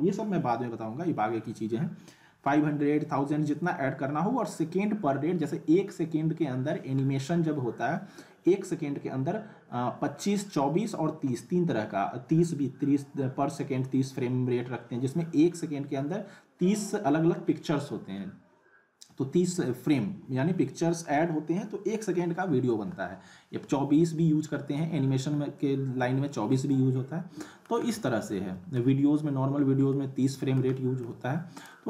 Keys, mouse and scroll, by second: 25.5-26.5 alt+middle drag, 27.8 scroll up 1, 28.0-29.0 alt+middle drag, 31.6 click.